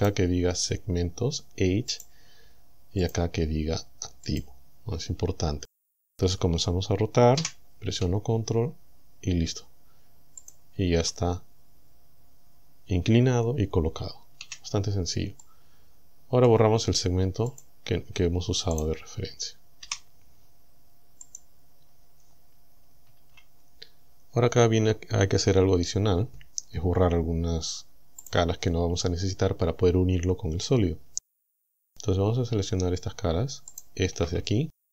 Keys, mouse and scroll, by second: 0.0 click, 1.9 click, 3.1 click, 4.3 click, 7.4 r, 10.5 ctrl+click, 14.4 a, 15.4-16.7 middle drag, 17.5 click, 18.8 right click, 19.9 Delete, 21.3 click, 23.1 z, 28.3 click, 33.7 alt+shift+right click.